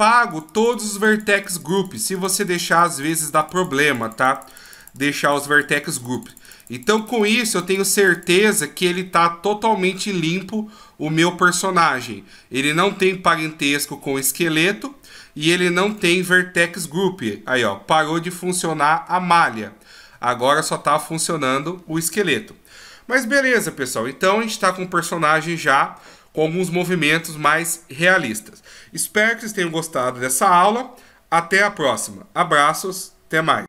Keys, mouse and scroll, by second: 0.3 click, 0.5 click, 0.8 click, 1.0 click, 1.7 click, 1.9-8.0 click, 2.1 click, 2.3 click, 2.6 click, 2.8 click, 3.1 click, 3.2 click, 3.5 click, 3.7 click, 4.0 click, 4.2 click, 4.5 click, 4.6 click, 5.0 click, 5.1 click, 5.4 click, 5.5 click, 5.8 click, 6.0 click, 6.3 click, 6.4 click, 6.7 click, 6.9 click, 7.7 click, 7.8 click, 8.1 click, 14.3 right click, 15.9 right click, 16.6 g, 18.6 middle click, 19.3-19.9 scroll up 3, 20.4-21.8 scroll down 2.